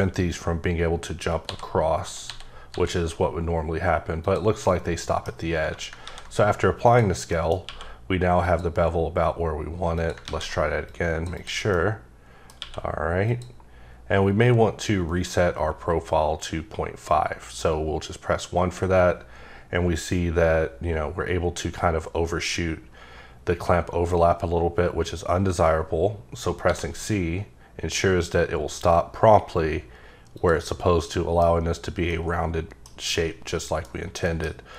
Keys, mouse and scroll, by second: 1.4-2.7 typing, 4.2 click, 4.6 middle click, 6.0 ctrl+a, 6.8 click, 7.3 middle click, 7.7 q, 8.4 click, 10.0 click, 10.2 a, 10.9 click, 11.3 double click, 11.7 middle click, 12.6 q, 13.2 click, 15.6 1, 26.6 c, 30.3 click, 31.1 middle click, 32.1 middle click, 33.1 middle click, 33.9-34.7 scroll up 3, 34.2 middle click.